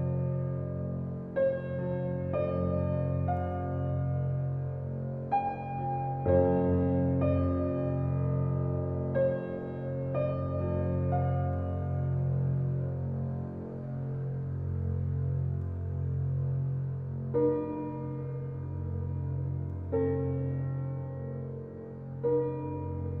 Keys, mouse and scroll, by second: 0.1 alt+middle drag, 0.6 alt+middle click, 1.1 scroll up 2, 2.6 g, 7.3 click, 7.9 ctrl+click, 9.6 g, 12.6-14.0 middle drag, 14.9 click, 15.8 g, 21.7-23.2 shift+middle drag.